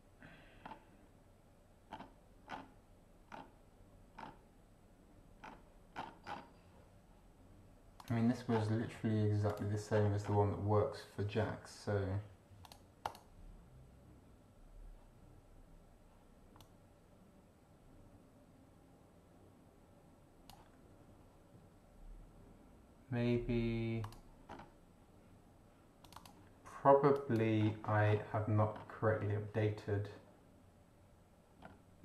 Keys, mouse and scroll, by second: 0.6 scroll down 2, 1.9 scroll down 2, 2.5 scroll down 2, 3.3 scroll down 2, 4.2 scroll down 2, 5.4 scroll down 2, 5.9-6.5 scroll down 2, 8.0 click, 8.5-8.8 scroll down 2, 9.5 click, 9.9 scroll down 2, 12.6 click, 13.0 click, 16.6-20.7 drag, 24.0 click, 24.5 scroll up 2, 26.1 click, 27.1 click, 28.1 scroll down 2, 28.7 scroll up 2, 31.6 scroll up 2.